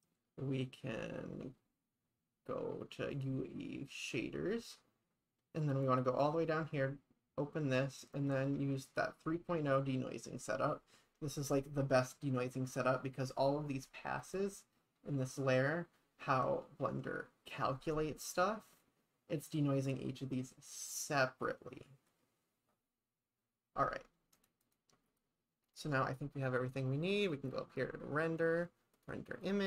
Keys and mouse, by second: 3.2 click, 5.9 click, 8.2-9.5 drag, 14.3 click, 24.4 click, 24.7 click, 25.7 click, 27.3-28.7 drag, 29.0 click.